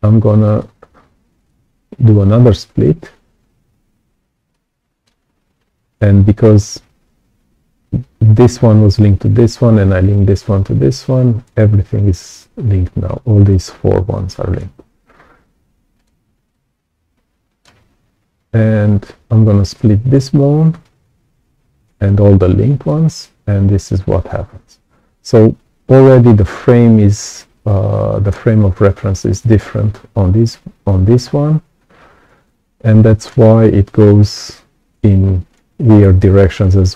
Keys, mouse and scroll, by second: 0.4-1.4 ctrl+alt+right drag, 0.5 click, 4.4 right click, 4.5 click, 15.0-16.0 ctrl+alt+right drag, 15.1 ctrl+alt+click, 16.4-17.6 right drag, 16.5-17.6 drag, 22.8-26.0 ctrl+alt+drag, 27.5 right click, 27.5 click, 32.4 right click, 32.5 click, 34.4-35.5 right drag, 34.5 click, 36.0 right click, 36.1 click.